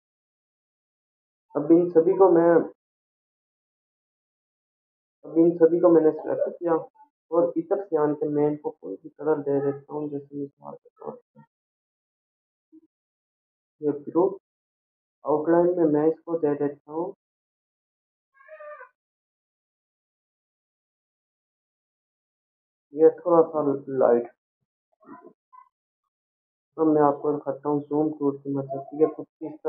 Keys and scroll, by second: 4.3 ctrl+-, 5.7 ctrl+0, 6.7 ctrl+a.